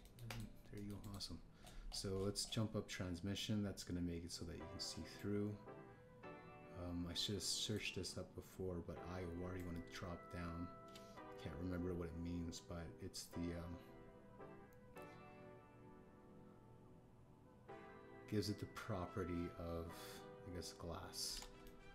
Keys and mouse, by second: 0.0 Tab, 1.0 drag, 1.2 click, 1.7 click, 1.9 click, 6.2-8.7 drag, 10.5-21.9 drag.